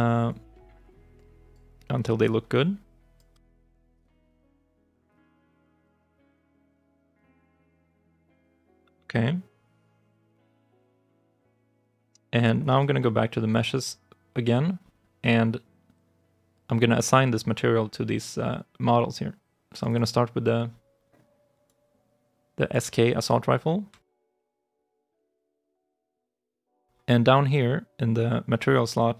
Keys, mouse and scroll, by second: 13.6 double click, 19.7 double click, 23.8 alt+click, 25.0 right click, 25.4 alt+click, 25.9 right click.